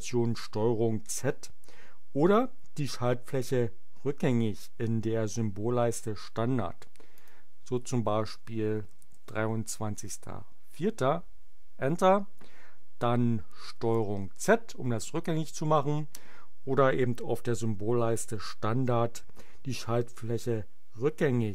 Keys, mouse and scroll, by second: 7.0 click, 8.2-10.0 typing, 10.7 Return, 13.9 ctrl+z.